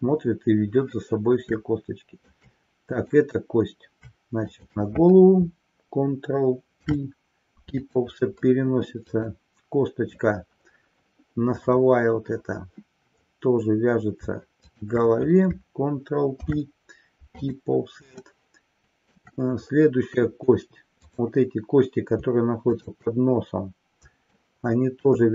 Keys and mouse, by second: 1.6-2.6 shift+middle drag, 3.1 click, 4.6 shift+click, 6.7 ctrl+p, 14.6 shift+click, 16.2 ctrl+p, 18.4-19.3 middle drag, 21.1 click, 22.7 shift+click, 24.4-25.2 shift+middle drag.